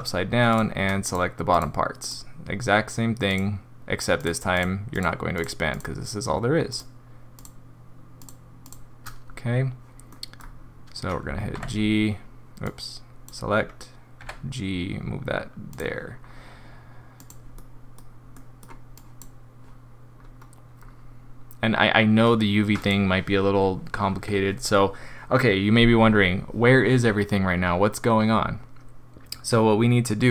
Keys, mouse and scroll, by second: 0.5 click, 1.0 shift+click, 1.5 click, 2.0 click, 3.3 click, 4.2 shift+click, 4.5 shift+click, 4.9 shift+click, 5.3 shift+click, 5.7 shift+click, 6.7 shift+click, 7.4 shift+click, 8.2 shift+click, 8.6 shift+click, 10.1 middle click, 10.3-11.5 scroll down 3, 11.5 g, 12.6 click, 14.2 g, 16.2 scroll down 2, 17.2 click, 17.6 middle click, 18.4 middle click, 18.9 click, 20.1-20.8 scroll up 3, 20.8 scroll down 2, 22.8 click, 23.5 scroll down 2, 24.1 scroll up 2.